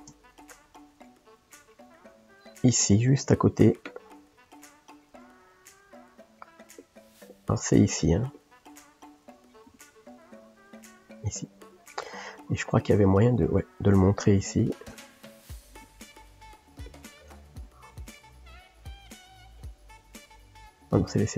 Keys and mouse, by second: 0.0 ctrl+space, 0.5-6.8 middle drag, 6.8 click, 7.2 middle click, 7.9 click, 8.8 middle click, 9.7 a, 16.3 click, 17.6 a, 19.0 click, 20.2 shift+click.